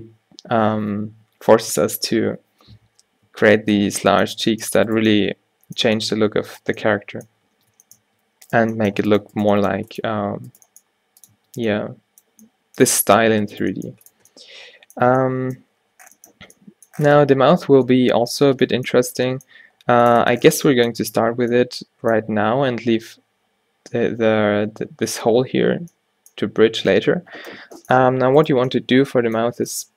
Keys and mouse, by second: 3.4 Tab, 3.8-6.5 drag, 7.6 Tab, 8.1 Tab, 8.7 g, 9.6 g, 10.7 g, 11.4 Tab, 13.4 Tab, 13.7 g, 14.2 Tab, 15.1 Tab, 28.5-29.9 drag.